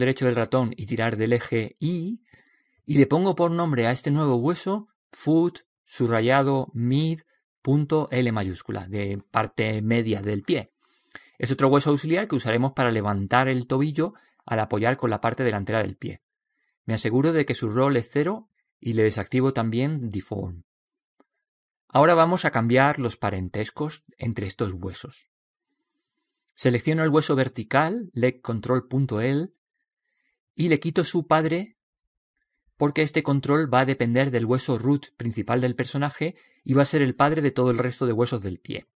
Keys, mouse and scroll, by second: 0.6 click, 4.3-5.6 right drag, 5.6 middle click, 6.3-8.4 drag, 11.6 BackSpace, 14.9 click, 19.6 click, 21.5-25.5 right drag, 28.6 right click, 31.2-32.9 drag, 37.9 click.